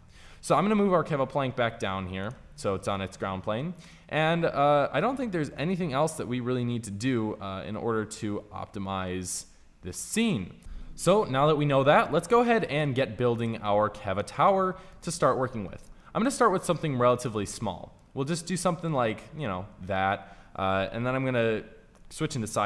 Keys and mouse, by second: 0.8 g, 7.7 middle click, 9.4 middle click, 12.4-14.1 right drag, 15.6 alt+d, 21.9 KP_1.